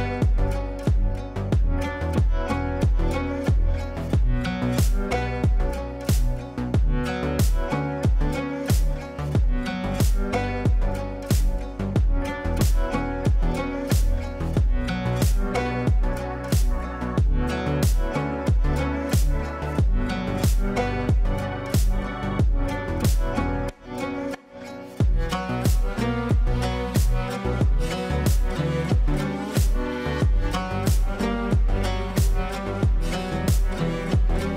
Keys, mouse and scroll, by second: 3.9 right click, 4.0 click, 5.1 ctrl+a, 5.9 shift+t, 7.1-8.8 typing, 11.4-14.8 typing, 17.2-19.0 typing, 20.7-21.3 drag, 22.4-26.8 shift+drag, 29.5-29.9 typing, 30.8 click, 30.9 click, 32.4-33.6 shift+drag.